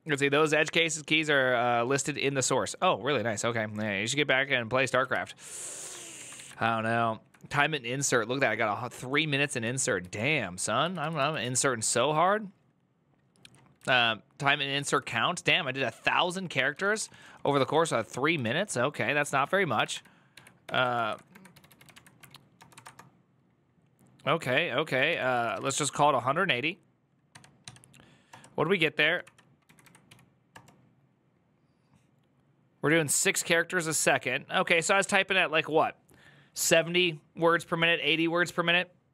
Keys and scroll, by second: 28.0 Return, 28.0 typing, 29.0 Up, 29.4 Left, 29.6 Left, 29.9 ., 30.3 Return.